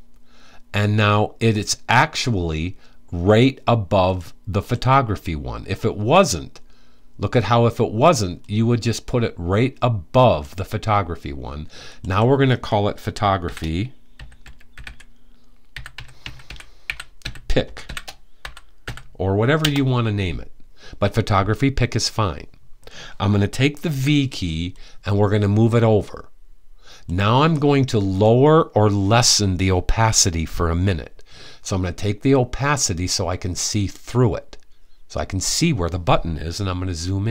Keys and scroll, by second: 13.0-18.4 typing, 23.5 v.